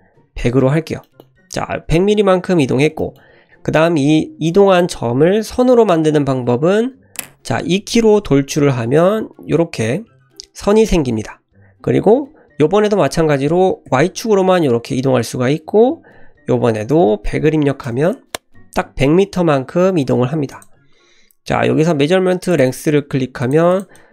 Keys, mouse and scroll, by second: 0.4-0.9 scroll down 2, 1.0 shift+middle click, 3.0 shift+middle click, 4.5 click, 8.3 e, 20.5-23.5 drag, 23.7 click, 24.0 click.